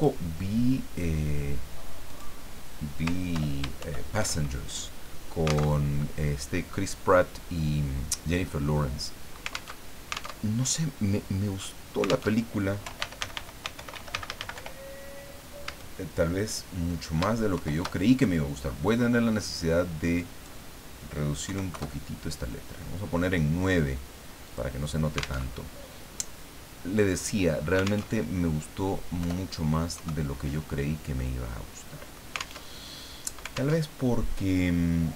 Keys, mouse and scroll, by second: 2.1 click, 3.3 ctrl+Home, 3.8 ctrl+shift+End, 5.8 alt+Tab, 9.7 alt+Tab, 12.3 alt+Tab, 12.6-15.6 typing, 17.5 shift+Home, 20.1 click, 21.4 KP_9, 21.7 KP_Enter, 24.4 click, 25.5 alt+Tab, 28.1 alt+Tab, 29.2 BackSpace, 29.9 KP_2, 31.3-32.3 drag, 32.6 alt+Tab, 33.7 alt+Tab.